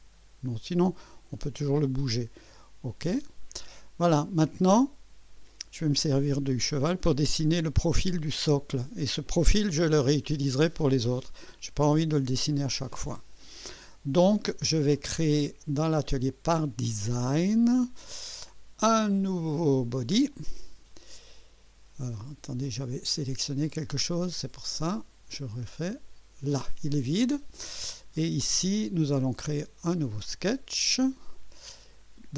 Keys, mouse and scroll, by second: 3.1 click, 4.6-5.7 middle drag, 16.1 click, 16.8 click, 18.3 click, 20.3 click, 22.7 click, 24.1 click, 24.8 click, 25.7 click, 30.9 click.